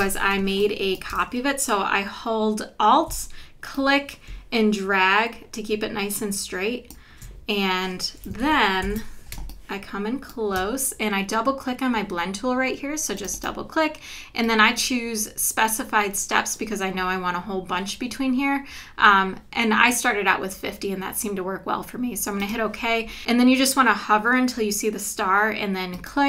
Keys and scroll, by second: 0.4 space, 8.4 super+=, 9.3 space.